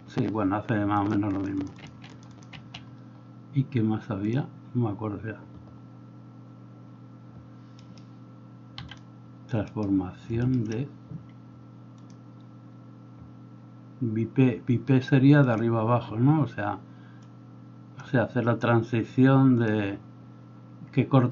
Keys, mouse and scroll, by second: 1.3 middle click, 1.5 click, 2.0 middle click, 2.3 click, 2.6 Escape, 2.6-7.9 middle drag, 7.9 right click, 8.0 middle click, 8.8 x, 8.9-21.3 drag, 9.7 middle click, 9.7 right click, 10.4 middle click, 10.4 right click.